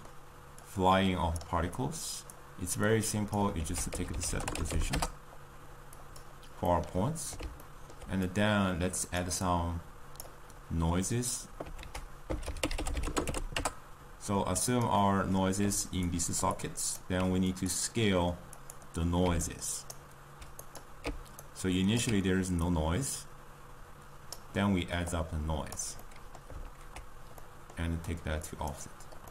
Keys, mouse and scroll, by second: 6.2 ctrl+a, 16.0 click, 16.3 d, 16.5-21.4 drag, 21.4-24.5 right drag, 24.5-29.2 drag.